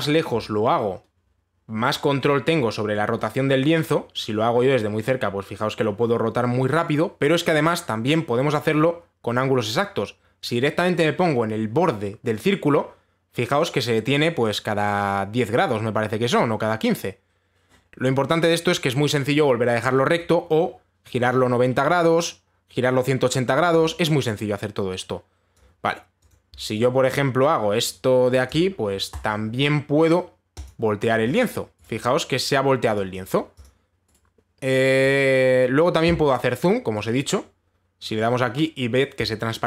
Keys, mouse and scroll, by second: 26.1 click, 26.9 click, 29.1 click, 29.8 right click, 31.3 click, 32.0 click, 32.5 right click, 33.6 click, 34.2 click, 34.7 right click.